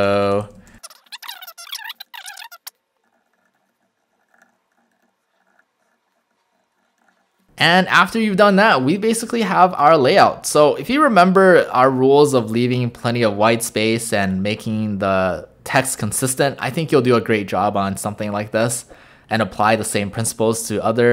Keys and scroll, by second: 0.1-6.9 typing, 1.2 Return, 4.5 Return, 5.6 Return, 6.6 Return, 10.2 w.